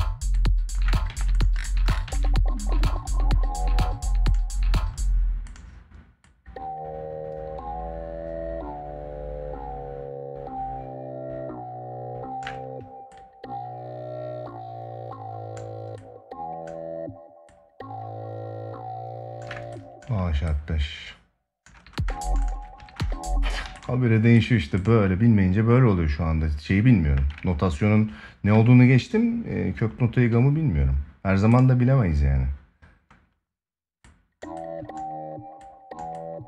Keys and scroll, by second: 0.8 ctrl+s, 1.8 ctrl+s, 4.5 space, 21.4 space, 22.4 space, 23.4 ctrl+s.